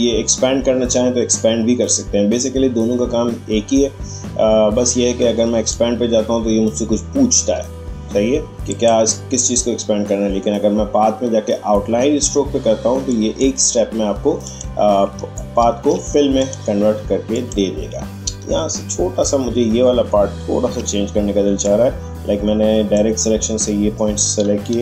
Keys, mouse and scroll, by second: 7.3 Escape, 8.7 click, 13.1 click, 15.3-15.9 alt+scroll up 1, 16.3 click, 18.1 alt+scroll up 1, 21.6-24.7 drag, 24.7 Right.